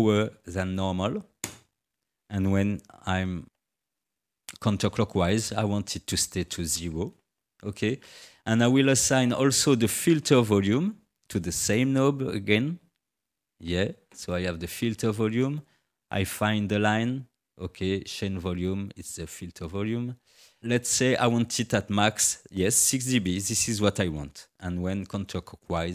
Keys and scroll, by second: 0.1 6, 1.4 Return.